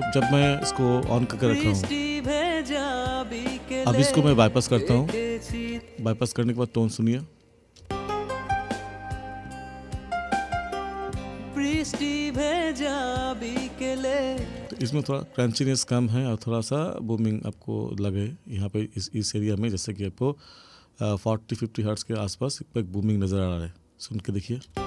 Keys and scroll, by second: 5.7 space, 7.8 space, 14.6 space, 24.7 space.